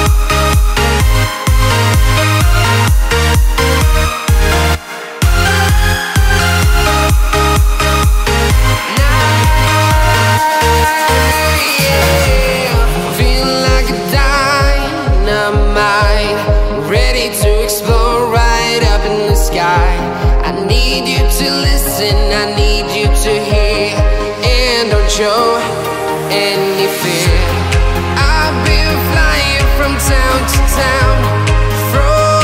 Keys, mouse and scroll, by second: 1.7-2.2 scroll down 1, 2.9 scroll up 1, 5.3 alt+Num_Lock, 5.3-6.0 scroll up 1, 6.3 alt+click, 7.0 scroll, 7.9-9.1 drag, 9.1-14.0 shift+drag, 14.4-14.7 scroll down 1, 18.5 scroll up 1, 19.1-20.8 drag, 24.7 click, 26.3-26.6 scroll down 1, 26.6-26.9 scroll up 1, 27.1 click, 29.2 click, 29.5-29.8 scroll down 1, 29.9-30.9 right drag, 30.9 scroll up 1, 31.6 right click.